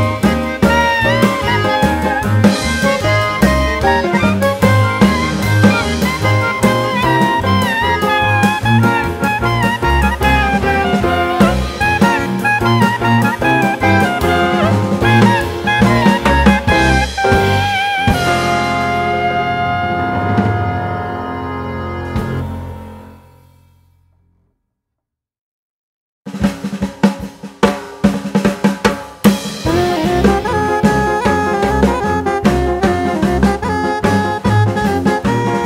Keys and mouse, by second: 2.2-4.3 drag, 5.4-7.2 drag, 8.9 click, 9.0-9.5 drag, 10.8 click, 13.0-14.3 drag, 15.2 click, 17.2-19.3 drag, 21.6 g, 25.1 click, 26.3-28.1 drag, 29.2-31.1 drag, 32.1 click, 33.0-34.8 drag.